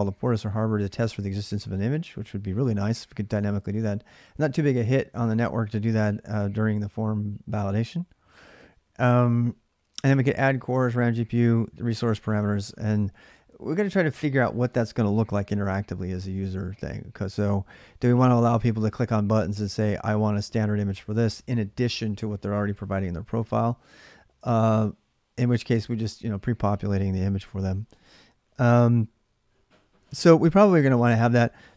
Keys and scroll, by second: 0.0-0.2 typing, 4.9-6.3 typing, 10.9-12.7 typing.